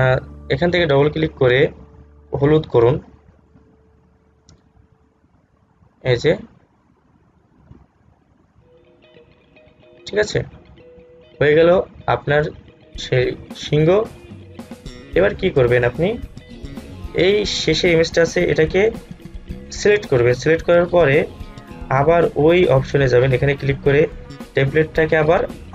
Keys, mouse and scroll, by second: 12.8 click, 17.2-18.2 scroll down 1, 19.9 click, 22.4 click.